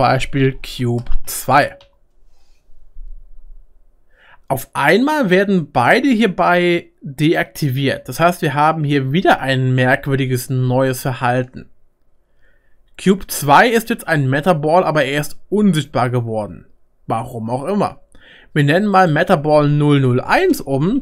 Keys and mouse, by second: 18.9 click, 20.9 BackSpace.